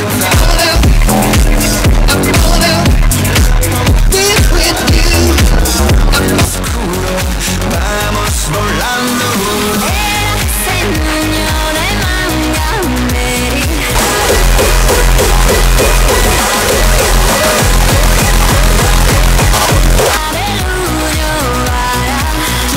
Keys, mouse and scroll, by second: 6.4 Page_Down, 20.1 Page_Down.